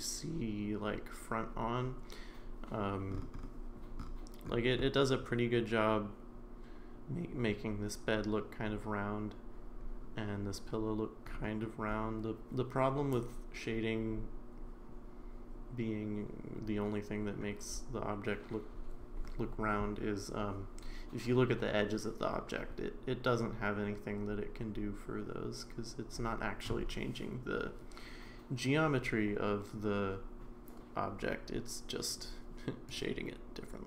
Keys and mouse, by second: 33.0-33.8 right drag.